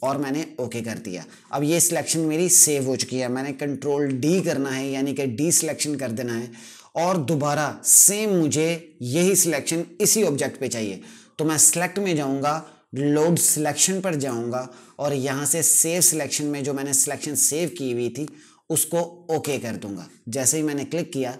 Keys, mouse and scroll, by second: 3.5 d, 11.0 click.